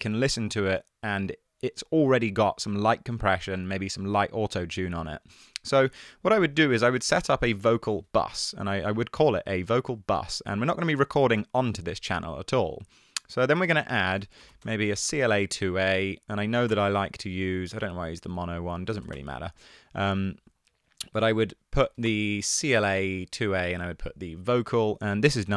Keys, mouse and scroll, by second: 8.0 super+r, 14.4-15.3 typing, 15.7 Down, 15.9 Down, 16.3 Down, 16.7 Return, 17.0-19.7 typing, 21.2-22.1 typing.